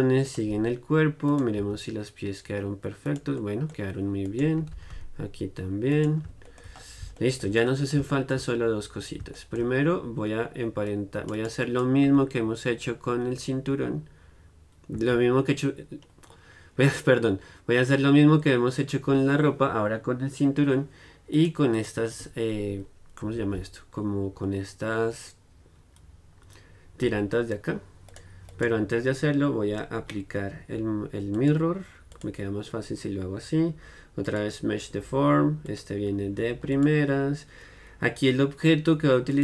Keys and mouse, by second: 1.7 g, 3.5 middle click, 4.4-9.9 right drag, 4.7 r, 9.9-11.0 middle drag, 11.0-14.7 right drag, 12.2 z, 15.1 z, 21.5-24.6 right drag, 23.4 z, 24.6-27.2 middle drag, 27.2 z, 27.5-31.5 middle drag, 31.5-39.4 drag.